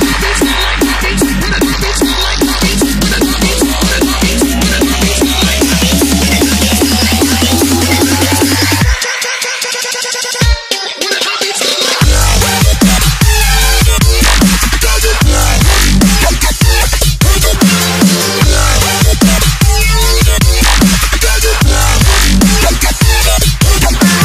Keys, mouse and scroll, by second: 1.9 ctrl+Num_Lock, 3.5 s, 10.3 s, 12.3 click.